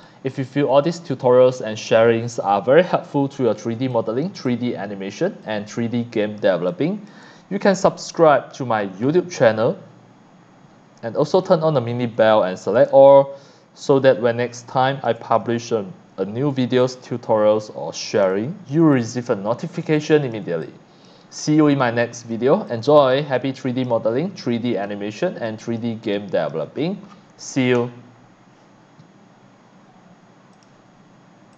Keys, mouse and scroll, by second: 0.7 click, 2.1 scroll down 1, 2.2 scroll up 1, 2.9 scroll up 1, 3.4 click, 3.5 x, 3.8 x, 3.9 click, 4.4 c, 4.5 click, 5.4 click, 5.5 x, 5.9 c, 6.1 click, 6.8 click, 11.3 click, 12.8 ctrl+click, 13.4 ctrl+click, 13.6 ctrl+click, 13.8 ctrl+click, 18.2 x, 18.3 click, 18.8 c, 19.0 click, 19.9 x, 19.9 click, 20.3 c, 20.6 click, 21.3-22.3 drag, 22.7-23.3 drag, 23.3 x, 24.2 shift+scroll up 1, 24.7 x, 24.8 click, 25.4 click, 26.0 c, 26.1 click, 26.7-27.2 shift+scroll down 6, 27.5 click, 30.5 click, 31.5 click.